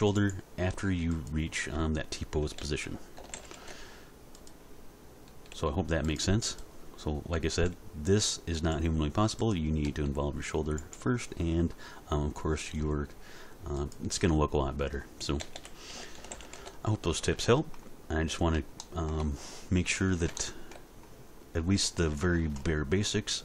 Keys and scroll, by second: 2.4 a, 3.2 alt+r, 3.3 alt+g, 3.5 alt+s, 5.5 r, 7.3 r, 9.8 r, 15.4 a, 16.1 alt+r, 16.3 alt+g, 16.5 alt+s.